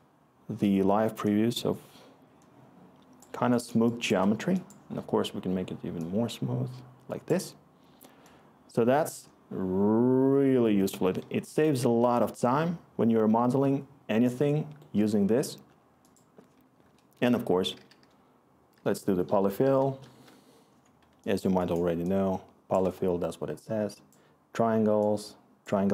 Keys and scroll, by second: 17.1 Tab, 17.4-20.1 typing, 21.3-23.4 scroll.